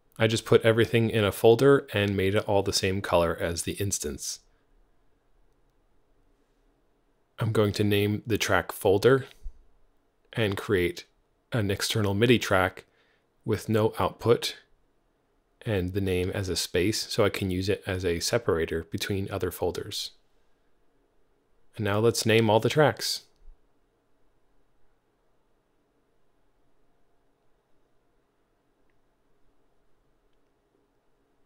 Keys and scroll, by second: 1.7 alt+c, 3.4 Page_Down, 5.3-7.6 typing, 9.9 alt+super+x, 15.0 space, 15.1 Return, 18.5-20.4 typing, 20.7 shift+super+Left, 21.1 super+c, 21.4 Tab, 21.6 super+v, 21.7 alt+BackSpace, 21.8-25.2 typing, 26.5 Home, 26.7 Left, 26.7 alt+shift+Right, 26.7 alt+shift+Right, 26.8 super+c, 26.9 Tab, 26.9 super+v, 27.1 Tab, 27.3-31.4 typing.